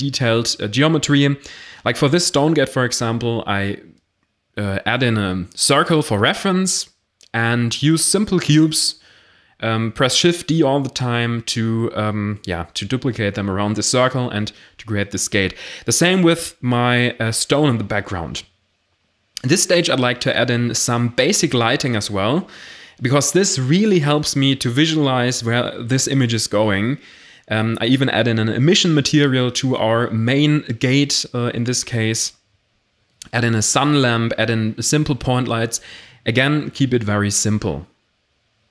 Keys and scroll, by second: 2.1 r, 2.2 x, 2.4 9, 3.5-4.6 typing, 6.4-8.8 typing, 10.0 d, 10.9 shift+d, 11.3 shift+d, 11.6 0, 13.3 r, 14.7 g, 14.7 y, 15.2 0, 15.6 s, 16.9 shift+a, 21.0 g, 21.1 z, 22.3 y, 22.6 0, 23.0 g, 23.0 z, 25.3 typing, 25.6 Return, 26.0 Caps_Lock, 28.2 1, 28.5 shift+a, 29.4 g, 29.5 y, 33.8 g, 33.9 z, 36.6-38.7 typing.